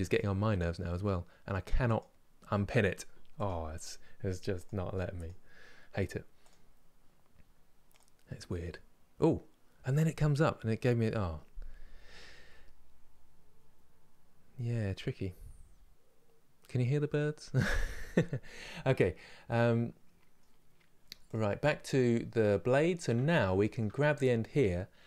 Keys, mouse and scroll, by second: 6.1 click, 18.6-20.7 middle drag, 20.7 Tab, 20.9 click, 21.2 middle click, 21.8 scroll up 2, 22.4 middle click, 22.7 Tab, 23.2-24.9 shift+middle drag, 24.9 1.